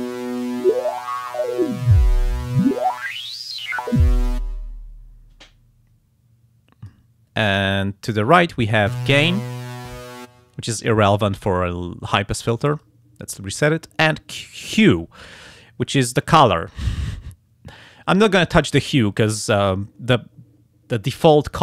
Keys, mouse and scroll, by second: 0.6-4.5 drag, 5.4-7.1 drag, 9.5 click, 12.6 click.